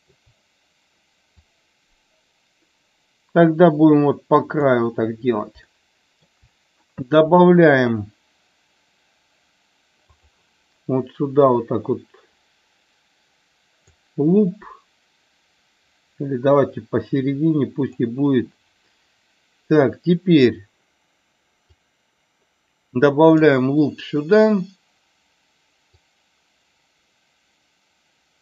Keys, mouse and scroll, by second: 1.3-4.7 drag, 5.7 shift+middle click, 13.9-17.9 drag, 21.8-23.4 drag, 26.1-28.4 drag.